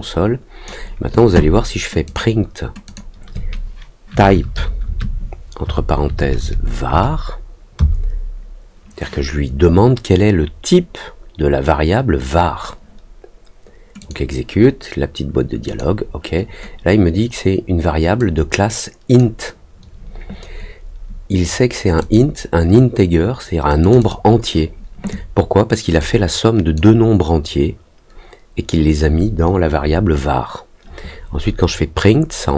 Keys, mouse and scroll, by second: 2.0 click, 2.8 click, 13.9 click, 15.6 click, 18.1 click, 21.9 click, 23.8 click, 23.9 click, 25.9 click.